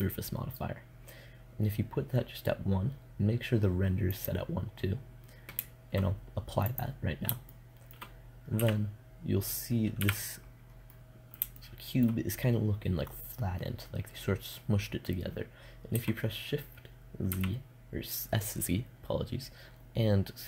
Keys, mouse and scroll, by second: 3.6-6.1 drag, 6.9-8.0 middle drag, 8.0 n, 9.4 n, 10.4 middle click, 15.4 s.